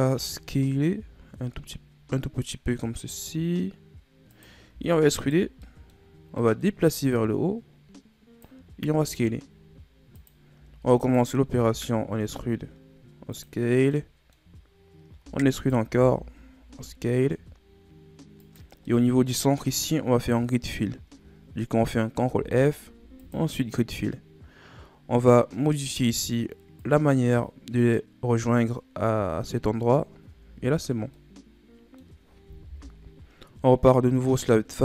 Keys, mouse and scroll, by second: 0.9 s, 4.7 e, 5.5 scroll down 3, 5.6 middle click, 6.1-6.4 scroll up 1, 6.4 middle click, 7.1-8.9 drag, 8.9 s, 10.5 e, 11.5 s, 13.7 scroll down 2, 13.9 middle click, 14.5-15.2 scroll up 3, 15.2 e, 15.9 s, 18.8-21.9 middle drag, 22.2 ctrl+f, 26.0-29.8 drag, 30.3 Tab, 30.9-31.2 scroll down 2, 31.2-32.7 middle drag, 32.7 KP_1, 33.8-34.8 shift+scroll down 4.